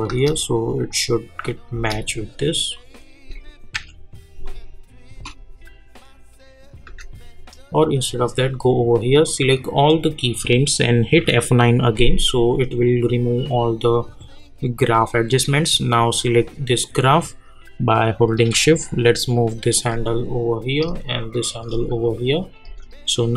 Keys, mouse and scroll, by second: 2.7 click, 3.7 =, 7.6-11.7 drag, 12.8-22.4 drag.